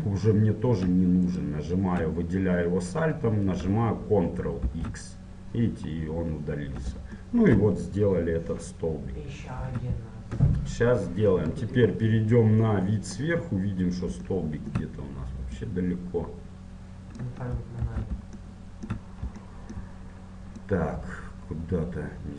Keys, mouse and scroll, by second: 0.2-1.4 middle drag, 1.4-4.7 right drag, 4.7 ctrl+x, 7.4-9.7 middle drag, 9.7 Tab, 10.5 KP_7, 11.2-15.8 middle drag, 15.8-18.0 drag, 16.0 middle click, 18.0 shift+c, 18.6-20.9 middle drag, 20.9-22.3 drag.